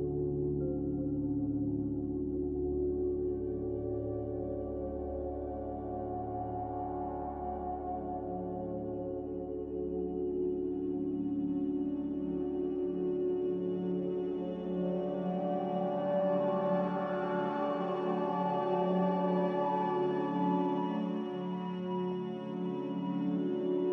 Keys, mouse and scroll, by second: 5.2 x, 11.4 s, 16.0 a, 21.2 ctrl+c, 21.9 ctrl+v.